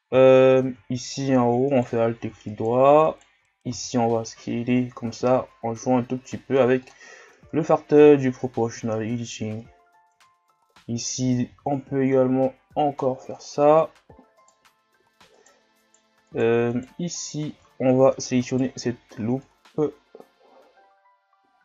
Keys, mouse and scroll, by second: 1.7 alt+right click, 2.5 alt+right click, 3.0 alt+right click, 3.7 s, 7.1 scroll down 3, 7.4 Tab, 8.2-8.6 shift+scroll down 1, 8.6-9.7 scroll up 3, 9.7-10.2 ctrl+scroll down 1, 10.2 Tab, 11.5 s, 14.4 alt+right click, 15.3 alt+right click, 15.8 alt+right click, 16.7 alt+right click, 17.1 alt+right click, 17.7-18.4 scroll up 1, 18.4 alt+right click, 19.5-21.6 drag.